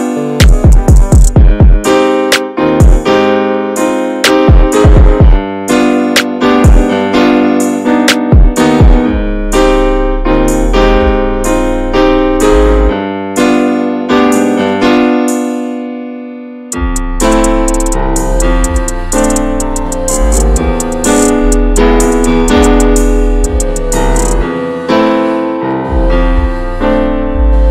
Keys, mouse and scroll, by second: 0.1 middle click, 0.3 Tab, 0.5-1.1 scroll down 4, 0.8 drag, 1.1-1.6 middle drag, 1.6 scroll up 2, 1.8 Tab, 2.0 middle click, 2.3-2.9 scroll up 2, 2.5 shift+middle click, 2.9 click, 3.3 l, 3.6 middle click, 4.0 click, 4.6 3, 4.7 click, 5.2 l, 5.6 middle click, 5.9 alt+z, 6.3 middle click, 6.6 alt+z, 6.8 middle click, 7.0-7.3 scroll up 1, 7.3 click, 8.7 scroll down 2, 8.9 middle click, 9.4 Tab, 9.5 drag, 9.7-10.3 scroll down 5, 9.8 middle drag, 10.3-10.7 shift+middle drag, 10.7 scroll up 1, 10.8 ctrl+a, 11.2 click, 11.4-12.2 shift+middle drag, 12.2 ctrl+s, 12.4 click, 12.7-15.3 middle drag, 15.3 drag, 15.6-15.9 shift+middle drag, 15.9 ctrl+s, 16.0 click, 16.3 ctrl+a, 17.0-17.7 middle drag, 17.7 ctrl+s, 18.6 click, 19.2 click, 19.4 ctrl+a, 19.8 middle click, 20.1 ctrl+s, 21.0-25.5 drag, 25.5-27.7 middle drag.